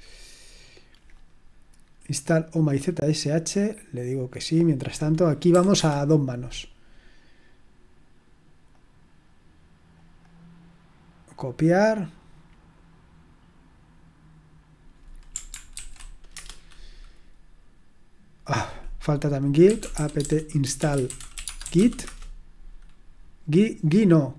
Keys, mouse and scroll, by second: 2.6-4.9 drag, 5.5 typing, 8.7-10.7 drag, 11.4-12.7 drag, 15.7 ctrl+alt+v, 16.3 Return, 19.4-22.2 typing.